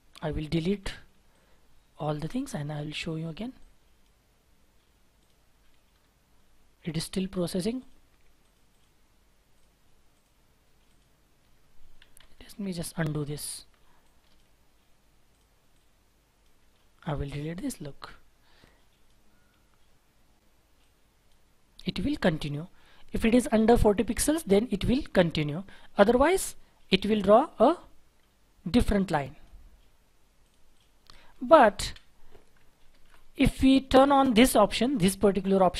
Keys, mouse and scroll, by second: 2.3 Delete, 5.9-6.3 scroll down 1, 6.3 scroll up 1, 8.6 double click, 11.3-11.7 scroll down 1, 12.2 ctrl+z, 12.3 ctrl+z, 12.5 ctrl+z, 12.7 ctrl+z, 12.9 ctrl+z, 15.7 double click, 16.5 Delete, 18.0-18.6 scroll up 1, 26.1-27.1 scroll down 1, 30.7 double click, 31.8 Delete, 32.8 shift+F4.